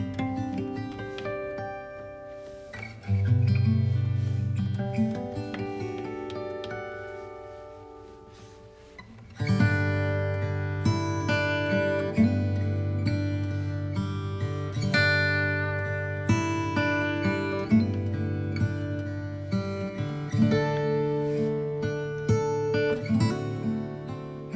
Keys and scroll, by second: 4.1 space.